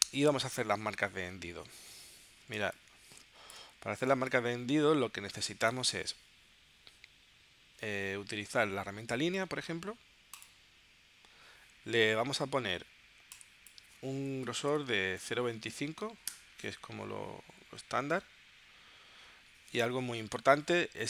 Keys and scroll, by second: 2.6 space, 4.1 space, 14.3-15.7 typing, 16.3 Return.